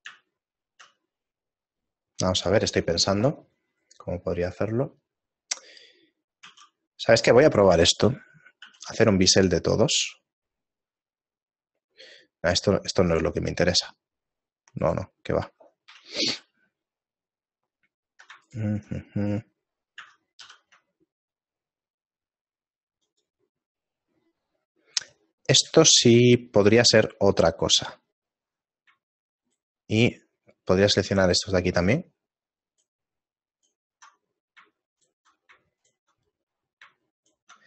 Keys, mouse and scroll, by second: 0.1 middle click, 0.9 shift+middle click, 8.7 ctrl+b, 8.7 a, 16.8 middle click, 16.8 a, 17.6-18.2 scroll up 1, 19.6 middle click, 19.6 alt+right click, 20.5 shift+g, 24.1 middle click, 26.4 shift+middle click, 26.4-28.1 scroll down 1, 29.5 alt+shift+right click, 30.3 shift+middle click, 31.9 alt+shift+right click, 32.8 alt+shift+right click, 33.6 alt+shift+right click, 34.2 shift+middle click, 35.3 alt+shift+right click, 36.2 shift+middle click, 37.4 alt+shift+right click.